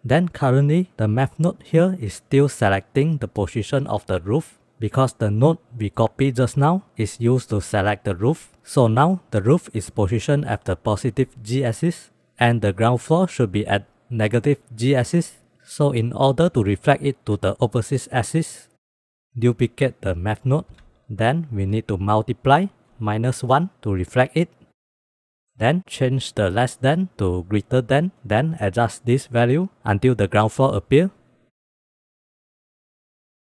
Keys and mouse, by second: 0.5-0.9 drag, 5.7-6.1 drag, 19.1 click, 20.2 shift+d, 21.6-22.6 drag, 22.9-24.7 drag, 25.0 click, 25.4 middle click, 26.6-27.8 drag, 28.3-28.6 middle drag, 29.3-30.1 drag, 30.8 click, 31.0 click, 31.5-33.5 drag.